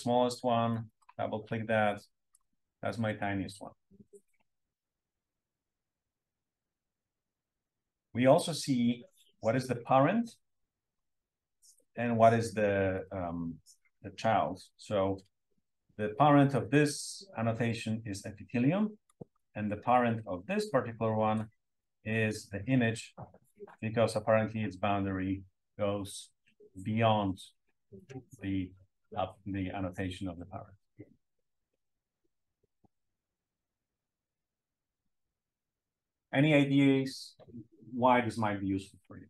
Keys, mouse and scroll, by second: 0.0-0.7 scroll down 1, 0.7 click, 0.7-1.7 scroll down 1, 5.5-6.8 scroll down 2, 9.7 click, 12.9-15.3 drag, 19.0 click, 21.5-22.3 scroll down 1, 22.3-22.6 scroll down 1, 22.6-23.7 scroll up 1, 23.7-25.6 scroll up 1, 25.6-27.9 scroll up 1, 27.9-31.9 scroll up 1, 31.9-32.5 scroll up 1, 32.5-33.3 scroll down 1, 33.3-34.2 scroll down 1, 34.7-35.2 scroll down 4.